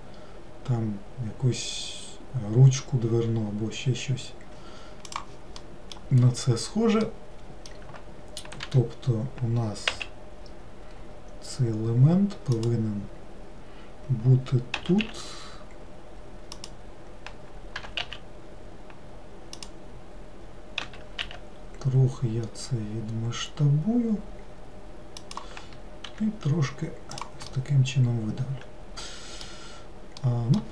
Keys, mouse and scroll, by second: 5.7 middle click, 6.4-7.1 scroll up 1, 7.1-8.7 middle drag, 8.7 g, 14.8 s, 17.8 g, 20.9 s, 26.1 e, 27.5-30.7 middle drag.